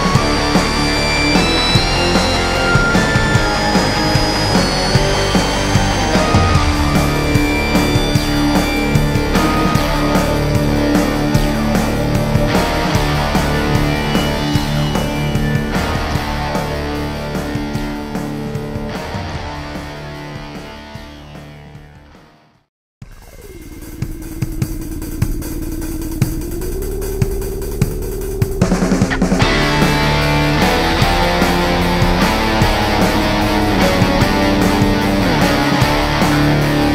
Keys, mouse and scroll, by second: 6.1-11.7 drag, 12.1-16.0 drag, 16.4-19.7 drag, 20.1-24.0 drag, 23.9-24.3 scroll up 2, 25.0-36.9 drag.